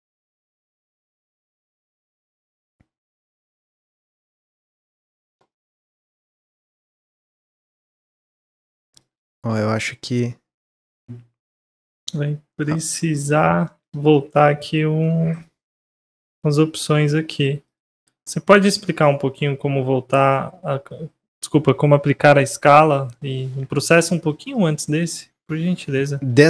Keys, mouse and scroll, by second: 1.2-3.5 drag, 5.9-8.9 middle drag, 8.9 click, 10.5 click, 12.0 middle click, 12.9 click, 13.2 Tab, 13.6 Tab, 13.8 click, 14.0 Tab, 15.0-16.8 middle drag, 16.8 Tab, 17.6 click, 19.3 click, 20.0 ctrl+s, 23.8-24.4 middle drag, 24.4 drag, 24.8 click, 25.8 click, 26.3 Tab.